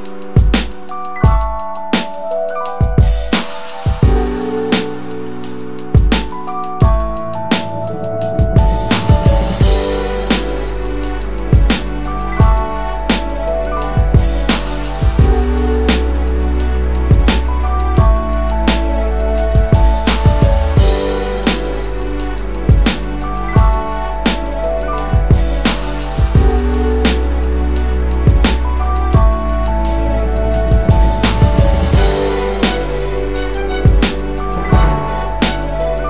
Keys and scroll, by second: 1.5 w, 19.4-20.4 typing.